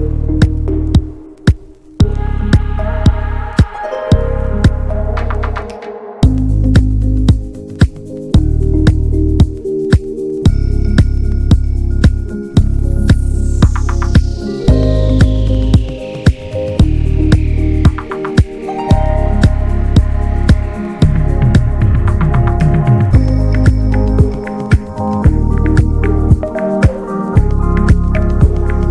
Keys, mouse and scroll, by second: 0.1-0.4 middle drag, 0.4 ctrl+s, 0.5 ctrl+drag, 0.7-1.8 middle drag, 1.8 scroll down 2, 2.5 scroll down 1, 2.8-3.3 middle drag, 3.3 scroll down 1, 3.5-4.7 shift+middle drag, 4.7 ctrl+s, 5.0 shift+middle click, 5.1 scroll up 1, 5.3-6.1 middle drag, 6.1-6.8 scroll up 2, 6.4 shift+middle drag, 6.8-8.1 middle drag, 8.1 scroll down 1, 8.4-8.8 shift+middle drag, 8.8 click, 9.1-9.6 scroll up 1, 9.6 ctrl+1, 10.2 click, 10.5-11.3 middle drag, 11.3 Tab, 12.2 click, 13.6 click, 14.0 click, 14.2 scroll up 2, 14.4 shift+middle click, 14.8-15.3 scroll up 2, 15.0 shift+middle click, 15.7 click, 16.4 scroll up 1, 16.6 2, 17.2 click, 17.7 alt+shift+click, 17.9 alt+shift+click, 18.2 alt+shift+click, 18.5-19.2 alt+shift+drag, 19.5 alt+shift+click, 20.0 alt+shift+click, 20.3-21.5 middle drag, 21.5 alt+shift+click, 21.9 alt+shift+click, 22.7-24.1 middle drag, 24.1 alt+shift+click, 24.5 alt+shift+click, 25.0 alt+shift+click, 25.3 scroll down 1, 25.4 middle click, 26.2-26.7 scroll up 1, 26.7 alt+shift+click, 27.0-28.1 shift+middle drag, 28.1 scroll up 2, 28.4-28.9 shift+middle drag.